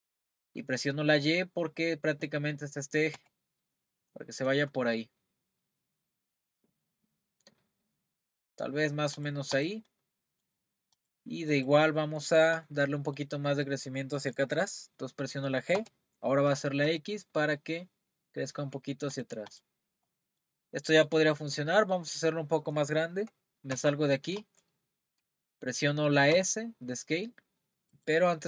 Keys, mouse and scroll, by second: 9.5 click, 9.9-11.0 middle drag, 11.0 click, 11.5 click, 12.9-15.7 middle drag, 15.7 g, 19.5 click, 19.8-20.1 scroll down 1, 20.1-21.2 middle drag, 21.2-21.7 scroll down 2, 21.7-23.7 middle drag, 23.7 Tab, 26.3 s, 27.9 click.